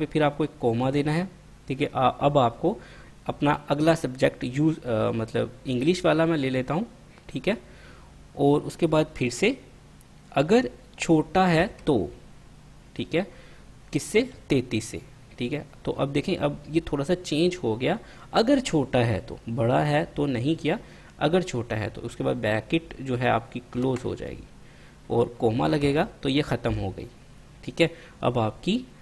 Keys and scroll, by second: 1.0 ', 11.8 <, 14.4 3, 19.7 3, 24.0 ), 26.0 ,.